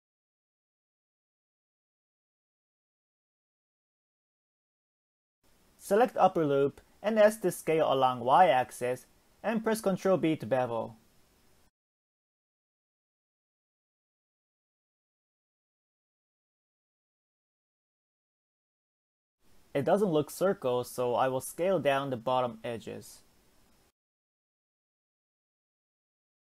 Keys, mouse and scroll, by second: 0.3 middle click, 0.7 Tab, 1.9 click, 2.1 click, 2.5 middle click, 3.6 shift+middle click, 4.5 s, 8.3-9.6 middle drag, 9.6 ctrl+b, 14.5 middle click, 15.4 Tab, 16.1 Tab, 16.6-16.9 scroll down 2, 16.9-17.8 middle drag, 18.1 click, 18.7 middle click, 19.7 shift+click, 20.2-23.6 middle drag, 23.6 s.